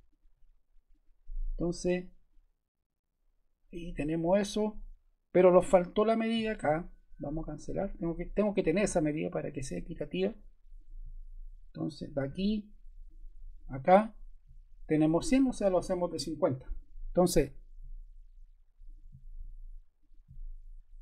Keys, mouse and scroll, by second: 0.0 click, 0.8 click, 7.4 click, 7.6 click, 18.8 click.